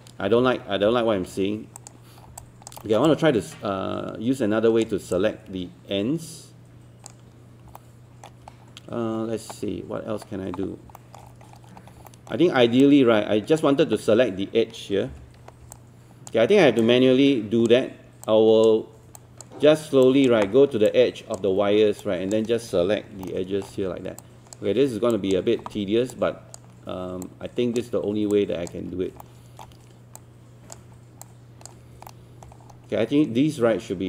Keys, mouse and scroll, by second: 0.4 ctrl+z, 0.9 ctrl+z, 1.8 click, 2.3 scroll down 1, 2.4 alt+click, 3.1-4.9 alt+drag, 5.1-7.7 drag, 7.8 alt+middle click, 8.5-10.9 scroll up 1, 11.0 alt+middle click, 11.3 scroll up 1, 12.1 alt+middle click, 12.8 click, 15.1 b, 15.7 shift+click, 16.8 shift+click, 18.3 shift+click, 19.2 shift+click, 20.0 shift+click, 20.9 shift+click, 22.0 shift+click, 23.3 alt+middle click, 24.2 shift+click, 25.1 shift+click, 26.1 shift+click, 27.3 shift+click, 28.4 shift+click, 29.2 alt+middle click, 30.2 shift+click, 31.3 shift+click, 32.1 alt+middle click, 32.5 scroll up 1.